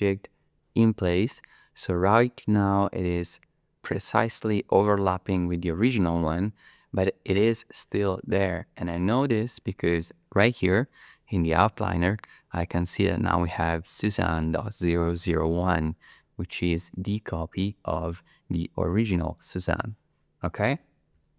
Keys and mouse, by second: 19.3 click, 20.8 g, 21.1 z.